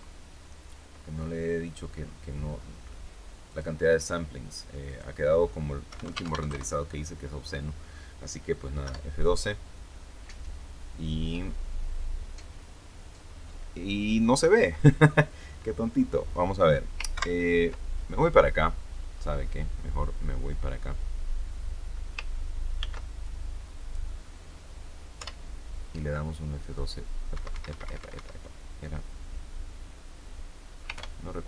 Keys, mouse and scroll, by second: 1.9-2.2 scroll down 2, 2.5 scroll down 2, 3.4 click, 4.8 click, 5.8 KP_1, 5.9 KP_0, 6.1 Tab, 6.2 KP_1, 6.3 KP_0, 6.4 KP_Enter, 8.7 F12, 17.1 ctrl+Right, 19.2-19.5 scroll up 2, 19.6 scroll down 2, 20.1 scroll up 2, 22.7 ctrl+b, 23.1 ctrl+click, 25.1 F12, 27.2 Escape, 30.9 ctrl+F12.